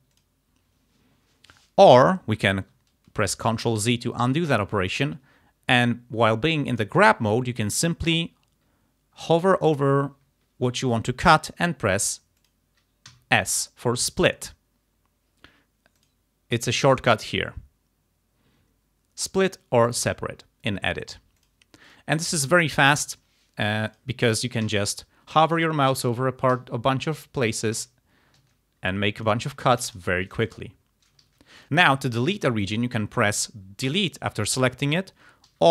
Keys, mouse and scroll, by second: 0.2 click, 3.8 ctrl+z, 6.8 click, 10.8 click, 12.4 click, 13.1 s, 16.0 click, 21.5 click, 21.9 click, 23.0 click, 23.9 click, 24.7 s, 25.6 click, 26.1 s, 27.8 s, 28.3 ctrl+s, 28.5 ctrl+z, 29.2 click, 30.0 shift+right click, 31.3 ctrl+z, 31.6 ctrl+click, 33.9 Delete.